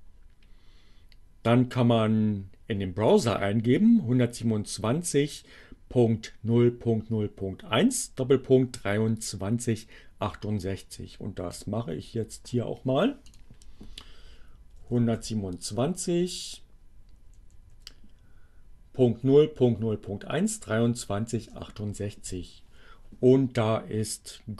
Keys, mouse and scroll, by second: 11.4 click, 13.1 click, 14.3 1, 14.9 2, 15.2 7, 15.8 Down, 21.1 Return.